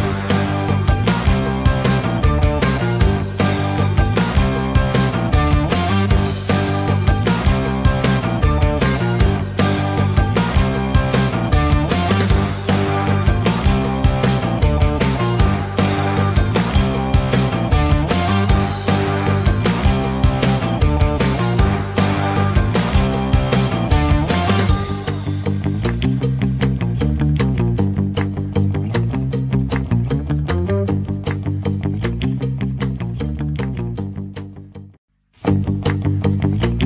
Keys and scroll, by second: 7.5 shift+Page_Up.